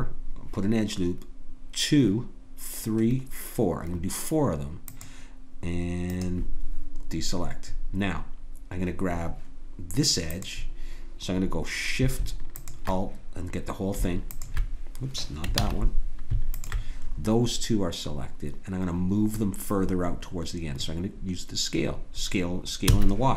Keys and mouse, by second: 10.3-15.5 drag, 15.5 ctrl+z, 17.1-19.1 drag, 22.9 s.